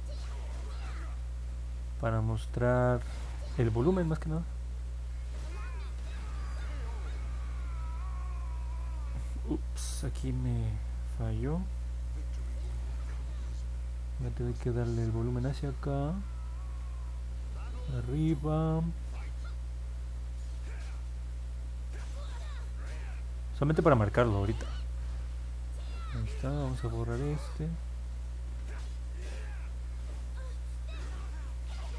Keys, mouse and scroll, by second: 7.1 middle click, 7.1-7.6 scroll down 2, 7.5 middle click, 8.4 middle click, 11.2 middle click, 11.9 middle click, 15.1-23.8 drag, 27.4-31.4 drag.